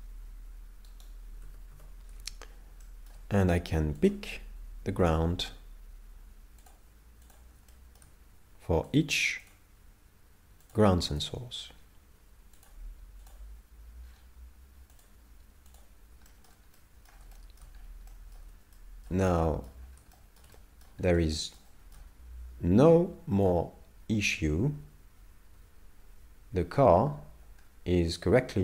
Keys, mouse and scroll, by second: 1.0 right click, 1.5 a, 2.8 shift+middle click, 4.0 click, 7.7 shift+middle click, 8.9 click, 11.6 scroll down 1, 12.6 click, 12.6-13.3 scroll down 6, 14.1 scroll down 1, 15.0 click, 16.3 shift+middle click, 16.8 middle click, 17.3 shift+middle click, 17.8 scroll up 3, 18.1 middle click, 18.7 shift+middle click, 19.3 middle click, 19.8-20.2 scroll down 4, 20.1 shift+middle click, 20.6 middle click, 21.1-21.5 scroll up 2, 21.4 shift+middle click, 21.7 shift+middle click, 22.2 scroll down 2, 23.5 click.